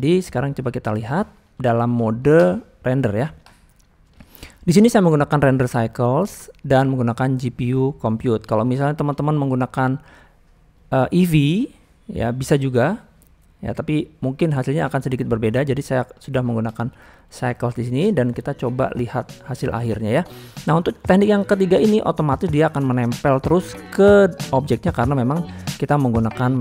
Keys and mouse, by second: 0.9 shift+middle drag, 1.2 middle click, 1.8 shift+middle drag, 4.7 click, 5.8 click, 6.7-7.7 drag, 8.2 middle drag, 8.9 shift+middle click, 9.2 middle click, 10.0 middle click, 10.8-12.3 drag, 13.8-14.5 middle drag, 14.9 middle click, 15.6-16.3 drag, 17.0 drag, 19.1 KP_0, 20.2 click.